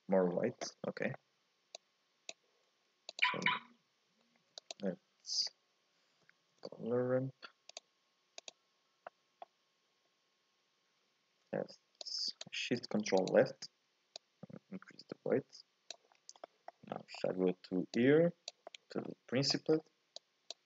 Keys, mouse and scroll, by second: 0.7 scroll up 1, 0.9 middle click, 1.7-3.2 drag, 3.7-4.3 scroll up 2, 4.3 shift+a, 9.0-12.0 middle drag, 12.0-13.3 drag, 14.1-16.1 drag, 16.1-16.4 scroll down 4, 16.4 middle click, 16.9-17.2 scroll down 3, 17.2 scroll up 1, 17.3 middle click, 17.9 click, 18.7 middle click, 19.1 scroll up 1, 19.2 scroll down 1, 19.5 middle click, 20.2-20.6 drag.